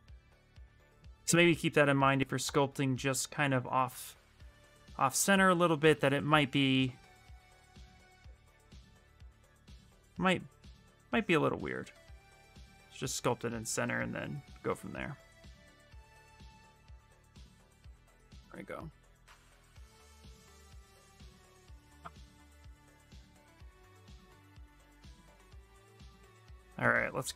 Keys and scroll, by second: 23.1 b.